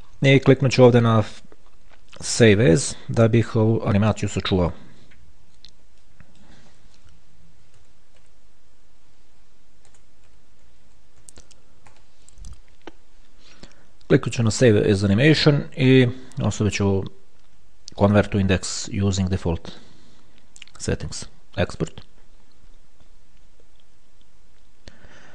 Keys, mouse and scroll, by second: 0.2-0.7 scroll up 1, 0.7 scroll up 1, 1.1 click, 3.0 click, 4.7 click, 6.3 click, 7.6-9.0 typing, 10.1 BackSpace, 11.1 i, 11.4 f, 12.1 Return, 14.7 click, 22.0 click.